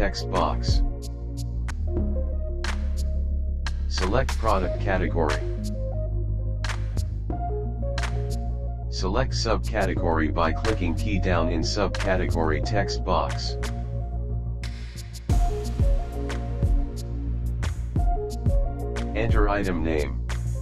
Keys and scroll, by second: 10.8 Down.